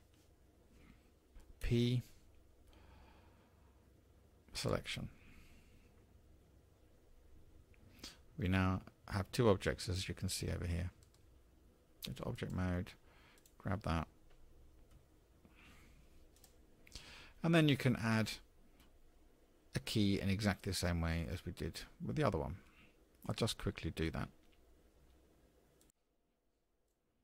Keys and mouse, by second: 0.0 l, 1.6 p, 11.5 Tab, 12.3 click, 15.0 g, 21.3-22.1 drag, 22.1-23.3 middle drag, 26.9-27.2 drag.